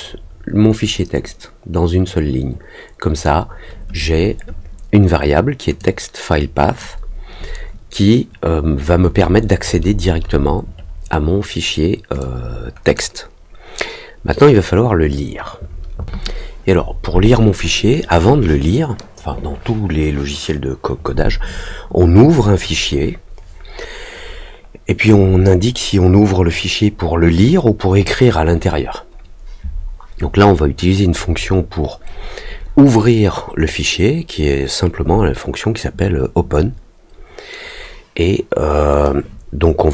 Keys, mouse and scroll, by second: 5.7-6.7 drag, 12.1 click.